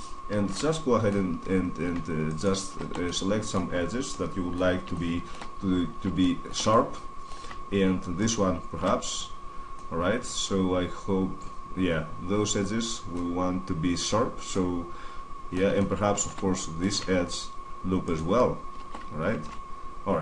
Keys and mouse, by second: 0.7 middle click, 2.0-4.2 middle drag, 5.4-9.9 middle drag, 10.2-11.4 middle drag, 12.9-17.8 middle drag, 17.8-19.2 right drag, 19.2 z, 19.6 middle click, 19.9-20.2 middle drag.